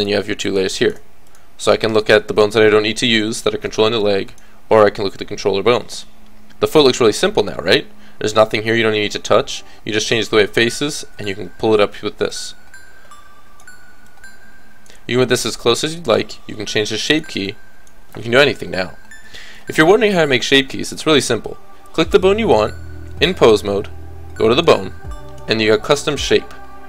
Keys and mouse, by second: 1.9-3.1 middle drag, 2.7 a, 3.1 click, 4.3-6.2 drag, 11.2-18.4 drag, 12.3-13.6 middle drag, 12.3 right click, 18.4 KP_3, 24.5-26.8 drag.